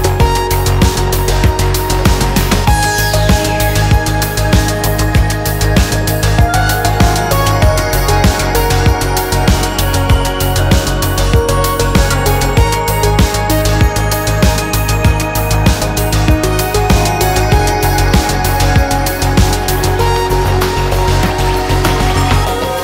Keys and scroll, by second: 6.0-6.3 typing, 10.7-13.7 typing.